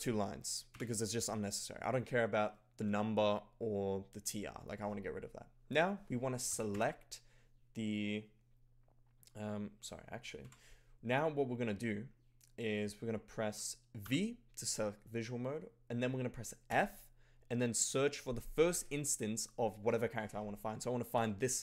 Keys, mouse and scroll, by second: 0.6 d, 6.3-7.2 typing, 10.4 0, 14.1 v, 16.7 f, 21.1 shift+>.